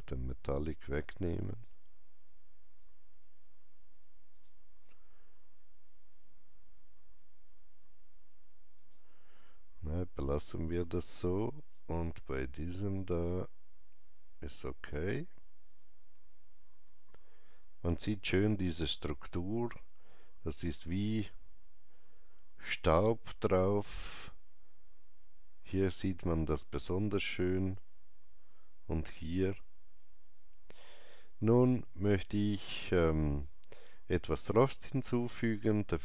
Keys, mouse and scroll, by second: 4.3 click, 8.7 click, 11.5 click, 15.6 click, 15.7 alt+click, 15.9-20.0 alt+drag, 29.9 alt+right click, 32.0 shift+middle click.